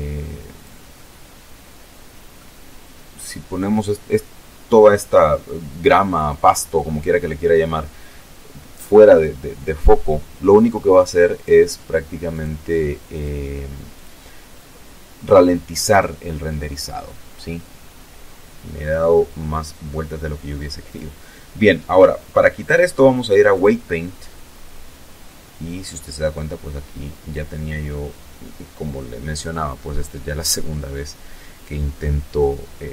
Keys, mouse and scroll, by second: 0.7 scroll down 2, 5.0 scroll down 1, 5.7 middle click, 9.4 click, 10.4 click, 11.2 click, 12.0 click, 14.0 right click, 18.9 click, 21.6 click.